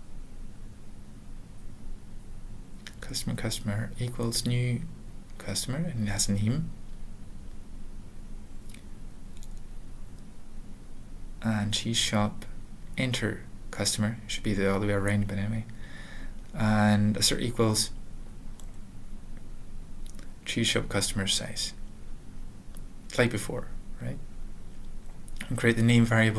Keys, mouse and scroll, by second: 0.8 typing, 2.3-3.1 typing, 4.9-5.7 typing, 6.8 ), 6.8 ;, 7.5 Return, 9.9 typing, 11.0-14.6 typing, 14.9 Return, 15.9 typing, 16.5 alt+/, 17.0-21.0 typing, 21.5 Return, 22.3 ), 22.9 ctrl+a, 22.9 ;, 23.3 ctrl+s, 23.4 ctrl+p, 23.6 ctrl+e, 24.1 ctrl+p, 24.5 ctrl+e, 24.5 alt+b, 25.1 alt+Return, 25.1 typing, 25.8 alt+Return.